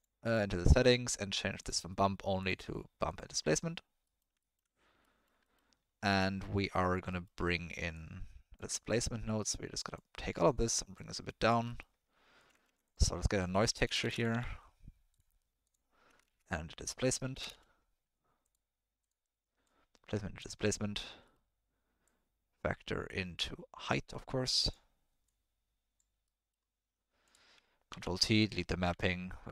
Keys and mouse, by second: 0.2 click, 1.7 click, 2.4-3.2 drag, 4.0 middle click, 4.4 ctrl+middle click, 5.0 middle click, 5.5 middle click, 6.1 middle click, 7.2 middle click, 7.9 click, 8.8 middle click, 9.4 middle click, 10.1-10.4 drag, 11.1 click, 11.8 middle click, 12.4 click, 12.6 shift+a, 16.2 shift+a, 19.8-20.4 drag, 21.3 middle click, 22.0-24.6 drag, 25.2-25.9 drag, 26.3 middle click, 27.2 click, 27.9 ctrl+t, 28.3 click, 28.9 Delete, 29.3 click.